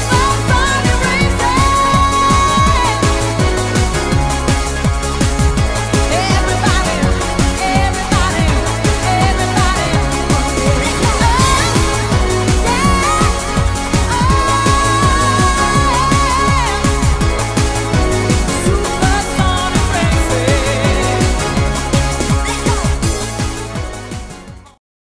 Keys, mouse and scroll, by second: 7.9 click, 10.2 click.